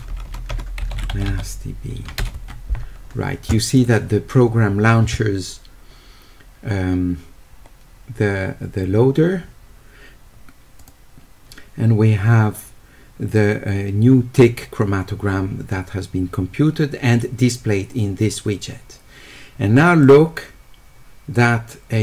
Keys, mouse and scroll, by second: 0.7-1.6 typing, 10.8 click, 20.0 click.